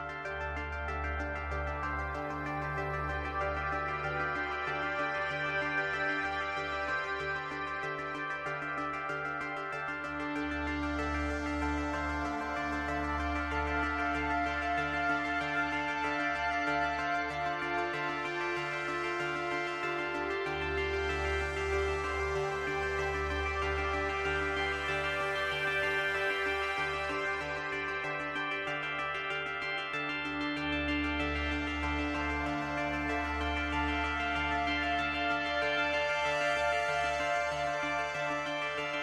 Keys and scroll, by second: 11.9 ctrl+z, 23.6 space, 25.3 space.